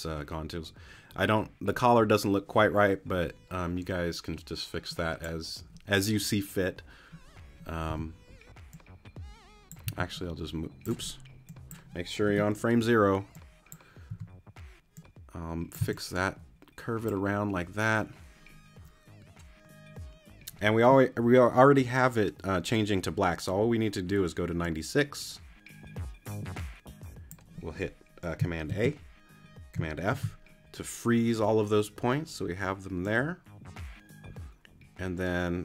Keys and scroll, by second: 7.9 t, 9.8 c, 12.3 BackSpace, 14.1 t, 15.8 c, 28.7 super+a, 30.1 super+f.